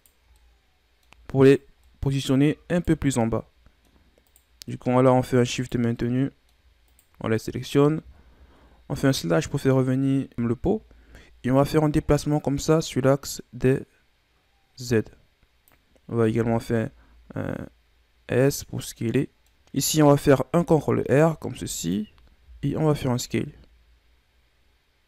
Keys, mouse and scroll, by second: 0.3-1.4 middle drag, 1.4 shift+right click, 1.8 middle click, 2.7 shift+right click, 3.2-4.2 middle drag, 4.2 shift+right click, 4.7 middle click, 5.6 shift+right click, 6.0 middle click, 6.8 shift+right click, 8.9 KP_Divide, 10.3 KP_1, 12.3-15.3 drag, 16.2 s, 18.9 scroll down 3, 19.1 middle click, 19.5 a, 20.5 ctrl+r, 22.4 s.